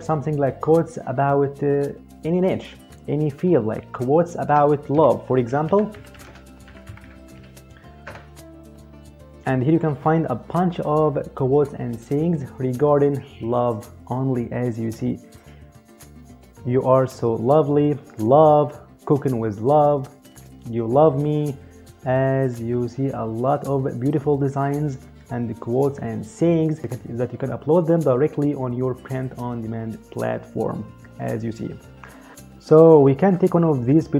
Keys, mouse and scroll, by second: 0.9 click, 4.2-7.0 typing, 7.8 Return.